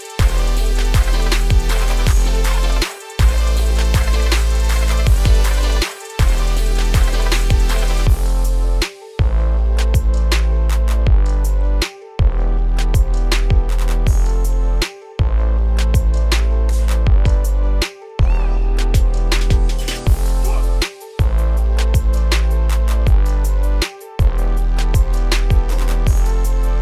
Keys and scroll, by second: 0.7 ctrl+a, 21.5 ctrl+a.